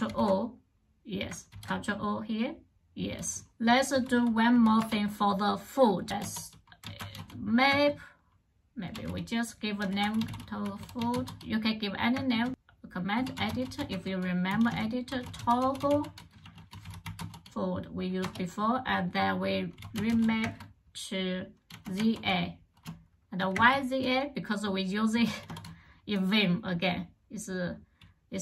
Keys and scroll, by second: 1.3 ctrl+o, 3.7 j, 4.3 o, 4.6 Return, 5.8-7.5 typing, 8.5-17.5 typing, 18.0 Return, 19.4-22.0 typing, 23.3 space, 25.2 shift+;.